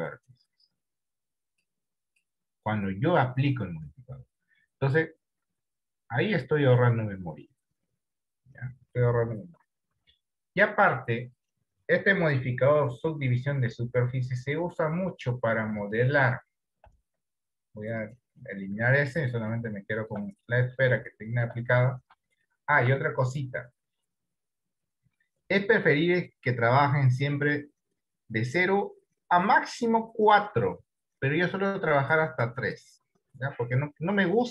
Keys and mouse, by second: 0.2 click, 1.5 click, 1.9 click, 10.1 Tab, 12.5 d, 14.2 d, 17.3 Delete, 19.4 middle click, 20.1 middle click, 20.8 middle click, 21.5 shift+middle click, 22.9 shift+middle click, 26.3 click.